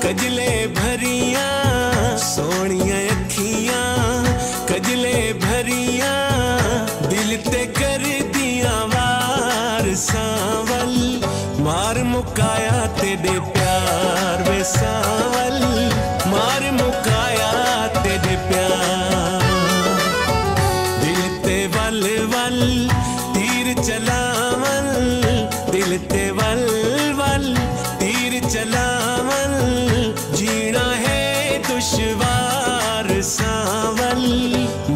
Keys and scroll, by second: 5.8 ctrl+s, 7.1 Return, 13.4 Right, 14.0 Up, 21.7 F8, 24.6 ctrl+a, 27.4 F8, 29.1 ctrl+a.